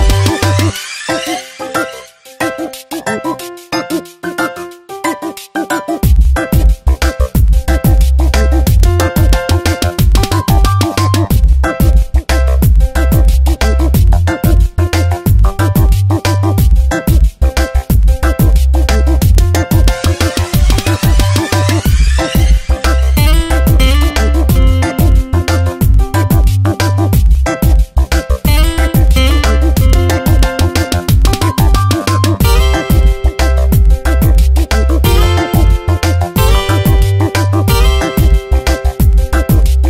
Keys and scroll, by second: 3.1 ctrl+z, 19.9 ctrl+d, 21.2 v, 23.3 space, 25.0 ctrl+z, 26.1 space, 27.2 ctrl+t, 31.6 Return, 35.2 ctrl+t.